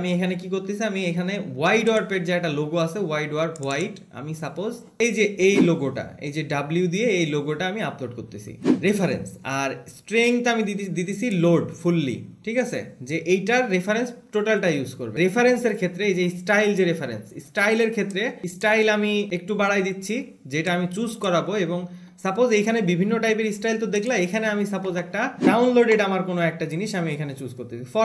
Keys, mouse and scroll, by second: 4.1 click, 5.3 alt+`.